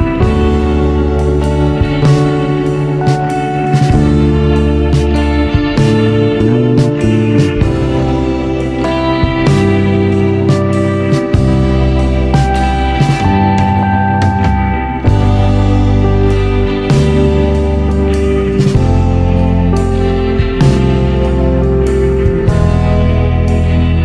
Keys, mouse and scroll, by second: 1.9 Tab, 2.8-5.9 drag, 6.3-8.1 drag, 8.1-9.5 scroll up 2, 9.5 click, 10.2 Tab, 11.1 click, 12.1 Tab, 12.5 scroll down 1, 13.4 click, 14.5 click, 15.5 drag, 16.0 click, 18.2 KP_1, 20.1 ctrl+KP_3, 20.7-21.2 scroll up 4, 21.2 click, 22.2 drag, 22.6-23.8 scroll up 2.